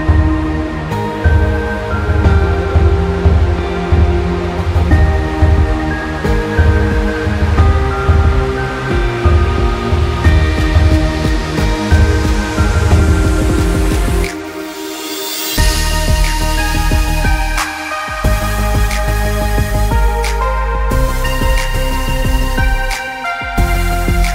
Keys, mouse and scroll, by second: 0.1 space, 8.4-8.8 alt+scroll down 1, 9.1 scroll down 1, 9.1 space, 9.2 click, 9.5 space, 10.9 click, 12.9 scroll up 1, 16.0 click, 21.5 click.